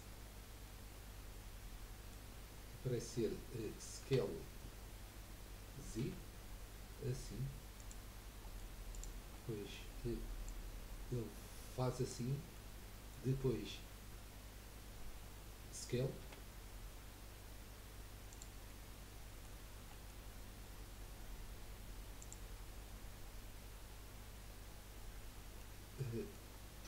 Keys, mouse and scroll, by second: 0.7-3.8 middle drag, 4.1 s, 8.3 scroll up 1, 8.5 middle click, 8.9 click, 9.4-10.4 middle drag, 10.4 click, 12.5-15.6 middle drag, 16.4 s, 18.8-21.0 middle drag, 21.0-23.1 scroll up 3, 25.8 middle click, 26.5-26.8 scroll down 2.